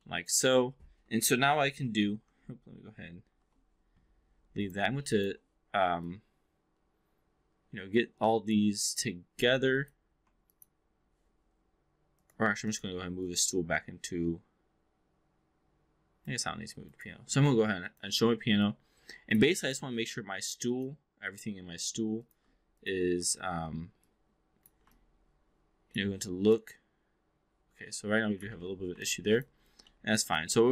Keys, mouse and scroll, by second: 0.0 alt+middle click, 0.4 alt+click, 1.6 shift+i, 3.2 shift+i, 4.6 click, 5.0 shift+click, 6.1-8.6 alt+drag, 9.8 click, 10.2 4, 10.4 click, 12.6 shift+click, 13.2-16.3 drag, 16.8-17.1 drag, 17.8 click, 18.6-19.4 alt+drag, 19.6 click, 20.6 click, 23.2 w, 23.9 click, 25.0-25.9 alt+drag, 26.4-28.5 drag, 28.5 ctrl+z, 29.0-29.5 alt+drag, 29.8 alt+middle drag, 30.2 alt+click.